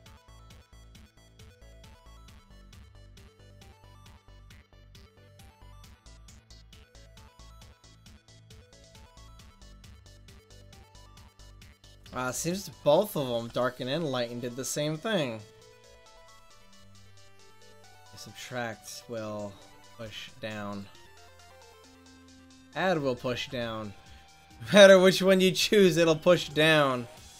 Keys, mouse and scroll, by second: 0.9-1.5 middle drag, 1.6-3.2 drag, 3.7 middle click, 5.1-6.5 drag, 5.6 middle click, 6.7 ctrl+z, 8.1 ctrl+z, 8.6-9.8 middle drag, 10.9 click, 11.7 middle click, 12.4 ctrl+z, 13.5 ctrl+z, 16.8-20.1 drag, 20.1 ctrl+z, 20.6-22.1 drag, 22.7 click, 23.5 ctrl+z, 26.3-27.3 drag.